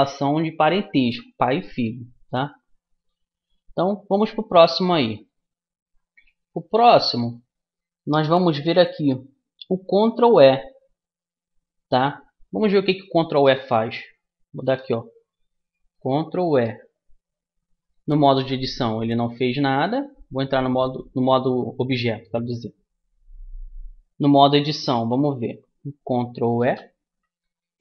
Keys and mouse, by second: 5.1-8.9 right drag, 6.1-8.1 middle drag, 16.4 ctrl+e, 18.3-23.7 middle drag, 20.1 Tab, 26.6 ctrl+e.